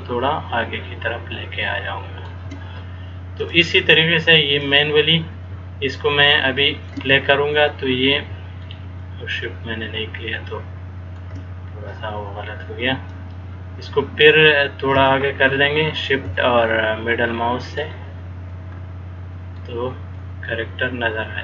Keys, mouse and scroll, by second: 3.7 click, 5.6 middle click, 9.1 shift+middle click, 11.4 shift+scroll up 1, 13.3 click, 16.6 shift+middle click, 20.3 shift+middle click.